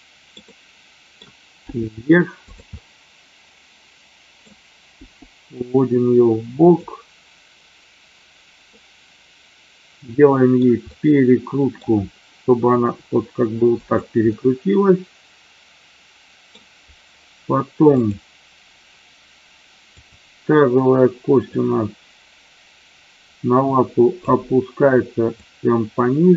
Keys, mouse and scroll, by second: 0.5 middle click, 1.6 g, 2.4 click, 2.7 scroll up 1, 2.8-4.4 middle drag, 4.9 g, 6.7 click, 8.7-10.7 middle drag, 10.4 scroll down 2, 10.8 middle click, 10.8 scroll up 2, 12.8 r, 13.7 click, 14.3-16.4 middle drag, 17.8 click, 19.9 click, 21.4-24.2 drag, 25.3-26.3 drag.